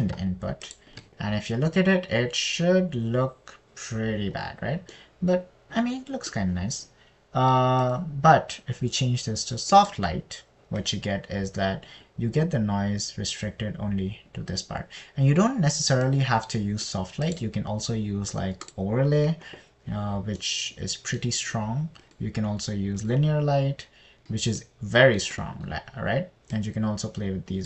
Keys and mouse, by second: 9.3-11.5 drag, 17.6 click, 18.7-20.3 drag, 23.5-24.6 drag, 26.0 middle click, 26.8 middle click.